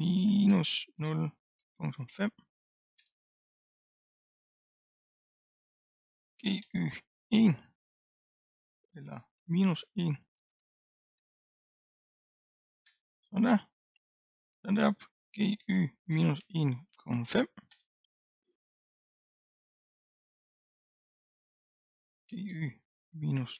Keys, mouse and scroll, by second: 3.0 Return, 4.5 click, 6.3 g, 14.2 click, 15.3 g, 17.8 Return, 19.1 middle click, 19.9-20.9 scroll down 2, 20.9 click, 22.2 g.